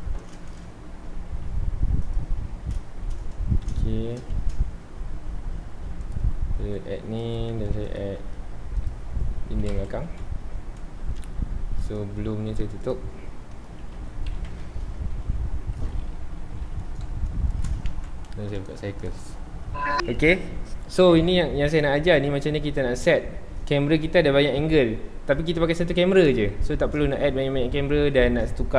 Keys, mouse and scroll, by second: 0.0 click, 0.4-1.3 shift+middle drag, 1.3 g, 2.1 click, 2.4-2.9 scroll up 1, 2.9 shift+middle click, 3.4-4.0 scroll down 1, 4.0 ctrl+s, 4.3 shift+a, 6.1 shift+a, 6.6 s, 7.5 Tab, 7.7 2, 7.8 click, 8.1 e, 8.9 click, 9.1 scroll down 1, 9.4 Tab, 9.7 alt+a, 10.1 ctrl+s, 10.2-11.9 scroll up 2, 11.9 click, 12.8 click, 13.3 scroll up 1, 13.4-13.9 middle drag, 13.9 ctrl+s, 14.5 KP_0, 15.1-15.5 scroll down 2, 15.5-16.3 shift+middle drag, 16.3 t, 17.3 scroll down 1, 17.5 shift+middle click, 17.9 ctrl+s, 18.6-20.2 drag, 20.1 z, 22.8-26.7 middle drag, 26.7 scroll down 1, 27.0-28.7 middle drag.